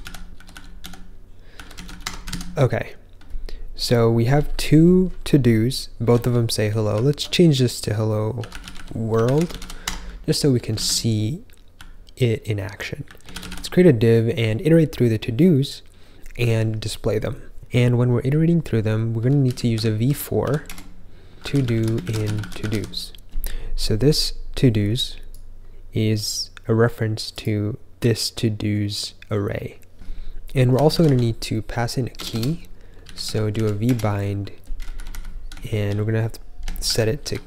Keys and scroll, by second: 0.0-2.0 typing, 2.2 super+s, 5.7-13.9 typing, 19.1-23.1 typing, 30.6-34.0 typing, 34.9 Left, 35.0 Left, 35.4 Right, 35.7 Right, 35.7 Right, 35.7 Right, 36.5-37.4 typing.